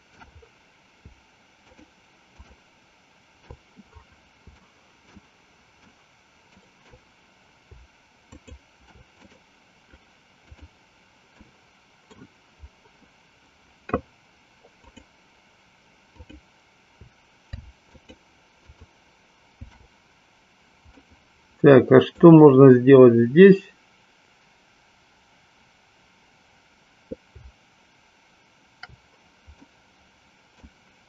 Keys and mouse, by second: 2.4 shift+click, 4.6 shift+middle click, 6.0 shift+middle click, 8.3 shift+click, 9.3-10.6 right drag, 11.5 middle click, 14.8 click, 16.1 click, 17.8 alt+shift+click, 18.8 alt+shift+click, 21.0-22.4 middle drag, 29.8-30.8 middle drag.